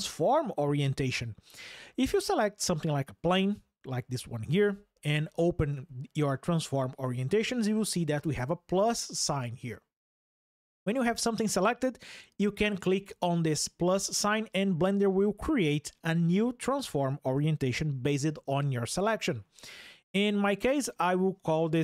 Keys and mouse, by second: 5.5-11.2 drag, 12.8-21.8 drag.